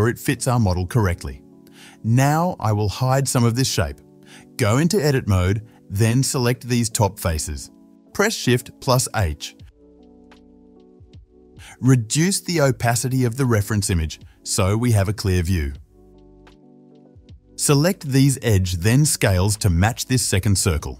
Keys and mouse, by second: 0.1 middle click, 0.7 s, 0.9-6.5 middle drag, 3.5 Tab, 5.7 3, 5.8 KP_3, 6.5-11.5 drag, 9.3 shift+h, 11.5-14.5 middle drag, 11.5 KP_7, 12.4 Tab, 14.5 click, 14.6-15.0 middle drag, 15.0-17.1 drag, 16.7 Tab, 17.1-18.4 middle drag, 17.4 Tab, 18.7-20.9 shift+middle drag, 19.9 s.